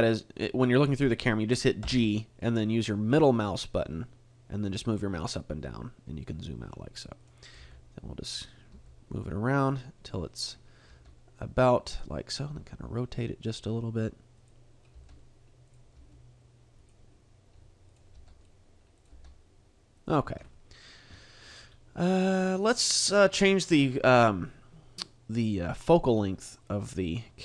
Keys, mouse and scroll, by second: 1.8 g, 7.6 click, 7.6 g, 8.3 click, 8.7 g, 9.8 click, 10.9 g, 12.0 click, 12.4 r, 14.9 g, 15.7 click, 16.0 g, 16.8 click, 17.4 r, 17.9 click, 18.2 g, 19.0 click, 19.1 g, 20.0 click, 20.2 a, 21.2 shift+middle click, 21.6-22.2 scroll up 2, 23.0 right click, 26.6 click.